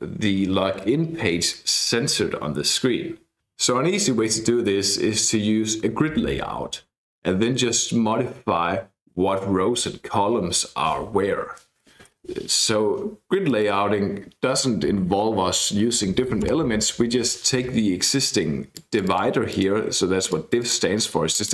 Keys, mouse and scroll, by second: 13.5 click, 16.6 Down, 18.7-20.0 drag, 20.3 click, 21.3 click.